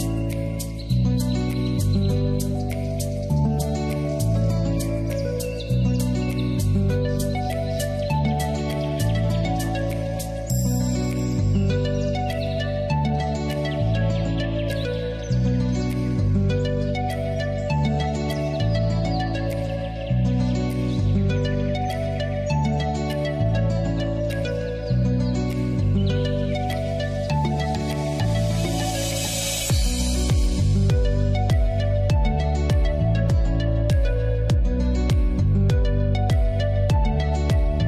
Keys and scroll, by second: 9.8 Return, 24.9 b.